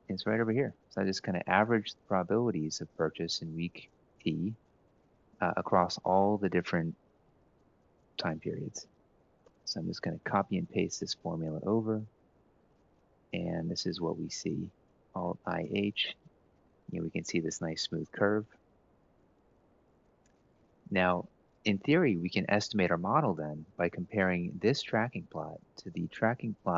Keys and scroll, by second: 1.0-1.7 typing, 3.5 Return, 4.8 Up, 5.5 Up, 5.9 Up, 6.8 ctrl+Right, 7.3 Down, 7.5 Down, 8.0 1, 8.3 ctrl+Left, 9.4 ctrl+c, 10.1 ctrl+shift+Right, 10.6 ctrl+v, 14.9 i, 15.2 h, 18.7 Escape.